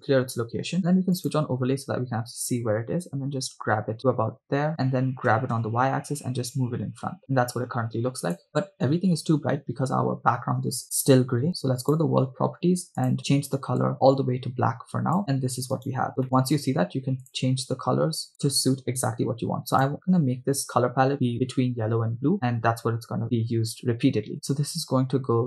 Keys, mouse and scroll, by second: 1.3 click, 3.9 g, 4.7 click, 5.4 g, 5.6 y, 7.3 click, 8.2 click, 11.8 click, 13.0 click, 16.0 click, 16.0 right click, 16.2 middle click, 17.3 click, 24.4 click.